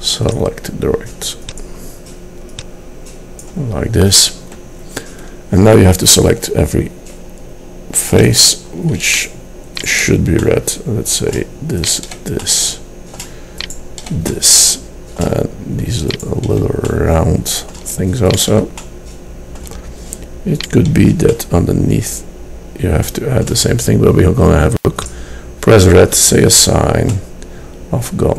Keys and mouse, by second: 9.2 click, 9.6-10.7 middle drag, 10.9 middle click, 12.4 middle click, 15.4-17.0 middle drag, 17.1 middle click, 19.1 middle click, 22.9 middle click, 25.2-27.4 drag, 27.8-28.3 middle drag.